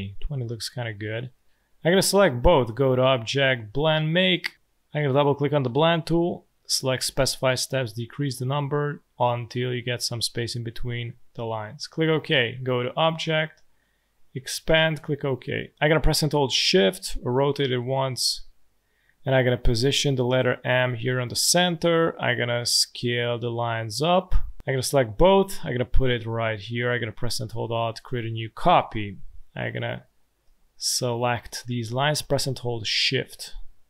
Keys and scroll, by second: 30.2 space.